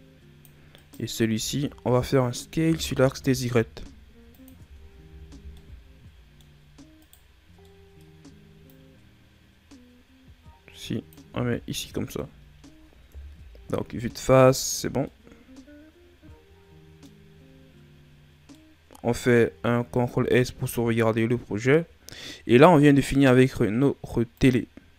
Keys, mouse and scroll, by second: 0.7 right click, 1.3 Tab, 2.5 s, 4.6 Tab, 5.0 a, 5.3 scroll down 2, 5.5 middle click, 6.4-6.9 scroll up 2, 6.9 right click, 7.5-8.6 middle drag, 8.6 click, 11.2 a, 11.5 scroll down 4, 11.8-13.0 middle drag, 13.0 KP_1, 14.8 scroll down 3, 15.0-17.2 middle drag, 17.2-18.5 scroll up 5, 18.5-19.9 middle drag, 19.9 ctrl+s, 20.3 scroll down 4, 20.7-23.7 middle drag, 24.3 click.